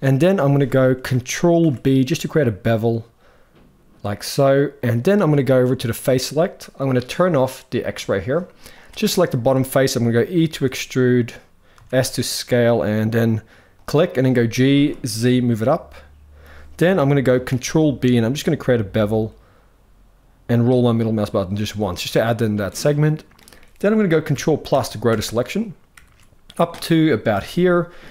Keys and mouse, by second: 1.3 ctrl+b, 5.7 click, 7.5 click, 8.9 middle click, 10.2 e, 13.9 g, 17.2 ctrl+b, 21.7-23.1 middle drag, 24.0 ctrl+KP_Add, 24.4 ctrl+KP_Add, 24.8 ctrl+KP_Add, 25.6 ctrl+KP_Add, 27.0 ctrl+KP_Add.